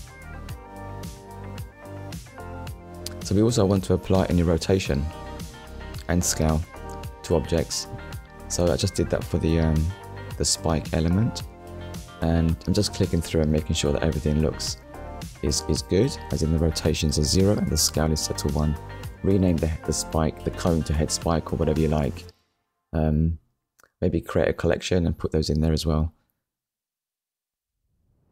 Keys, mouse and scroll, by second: 3.4 click, 4.1 click, 6.7 click, 8.4 click, 9.8 click, 11.9 click, 13.2 click, 14.6 click, 15.9 shift+h, 16.3 e, 17.0 shift+s, 17.7 k, 18.1 Return, 19.2 ctrl+s, 20.9 ctrl+s, 23.0 KP_1, 25.1 click, 25.8 click, 26.3 scroll down 1, 27.0 shift+middle click.